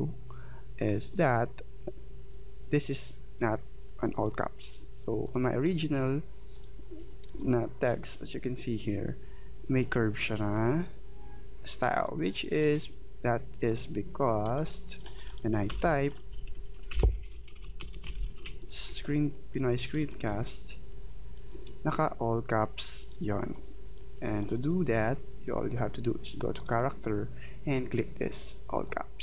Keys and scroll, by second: 7.3 space, 12.5 space, 15.7 t, 17.0-18.4 typing.